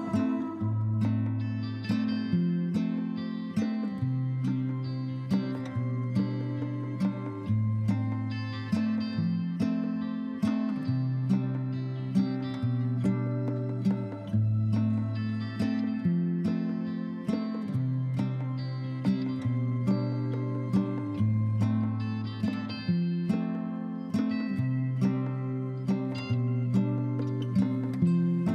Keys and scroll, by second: 24.9 b.